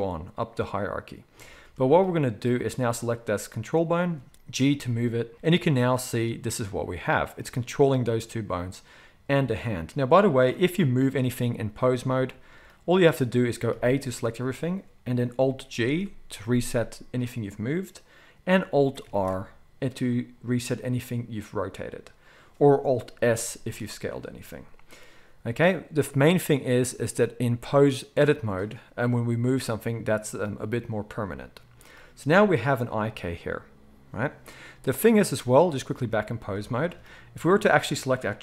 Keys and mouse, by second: 5.3 g, 10.5 r, 13.7 a, 15.7 alt+g, 19.0 alt+r, 23.1 alt+s, 27.1-37.6 drag, 37.6-38.4 middle drag.